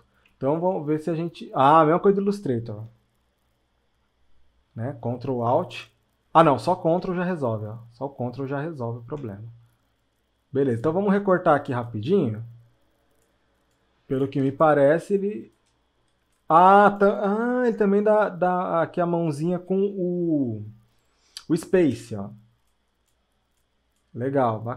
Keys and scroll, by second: 14.5 space.